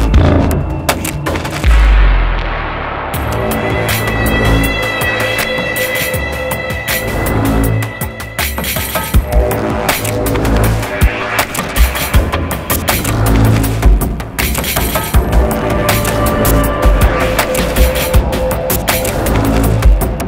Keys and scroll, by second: 12.8-15.0 typing.